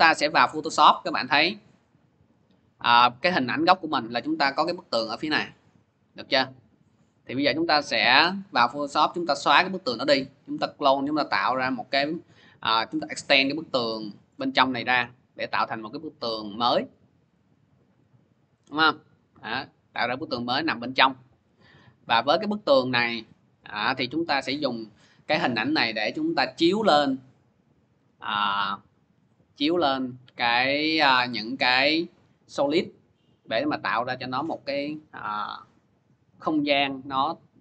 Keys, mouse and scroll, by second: 0.3 scroll, 1.6 click, 1.8 click, 4.9 middle click, 7.4 click, 7.6 click, 13.0 scroll, 13.6-14.2 scroll, 14.2 middle click, 15.2 middle click, 15.3 middle click, 15.7 middle click, 17.1 click, 17.3 click, 18.0 middle click, 18.1 middle click, 18.5 middle click, 18.9 middle click, 19.0 scroll, 19.8 scroll, 21.2 click, 21.4 click, 22.1-23.3 scroll, 25.0 scroll.